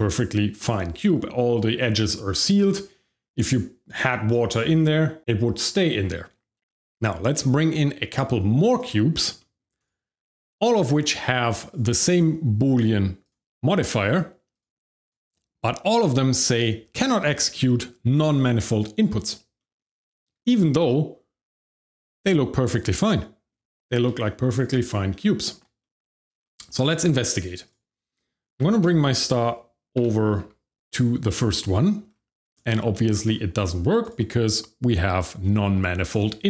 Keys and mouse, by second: 6.6 middle drag, 8.6 click, 9.4 middle drag, 9.8 click, 11.2 middle drag, 11.6 click, 13.2 click, 14.0 click, 14.5 click, 15.0 click, 19.6 middle drag, 20.4-23.5 shift+middle drag, 24.2 shift+middle click, 25.1 middle click, 25.8 shift+middle click, 26.4 shift+middle click, 27.0 middle click, 27.6 click, 28.6 g, 28.8 z, 30.0 z, 30.4 x, 31.6 click, 32.5 shift+middle click, 32.9 middle drag, 34.0 click.